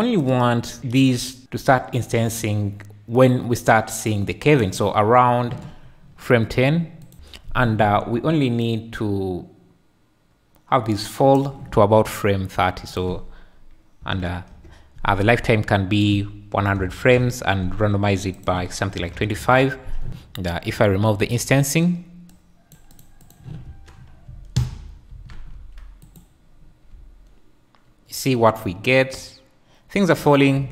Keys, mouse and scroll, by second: 0.3-4.7 shift+drag, 7.0 click, 8.7-11.4 shift+drag, 12.9-14.5 drag, 16.1-17.2 drag, 16.9 KP_0, 18.4 click, 21.2 click, 22.9 click, 23.2 click, 23.6 space, 24.5 a, 25.2 alt+a, 26.4 q, 27.1 `, 30.6 Escape.